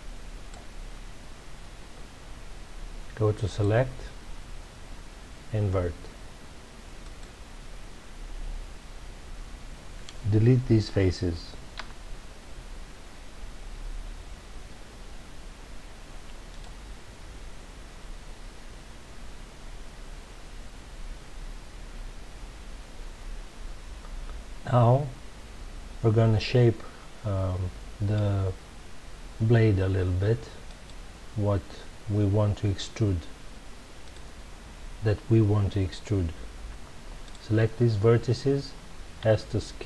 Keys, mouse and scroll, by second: 3.4-6.5 drag, 11.7 Delete, 30.6 click, 34.0 click, 37.2 shift+click, 39.2 s.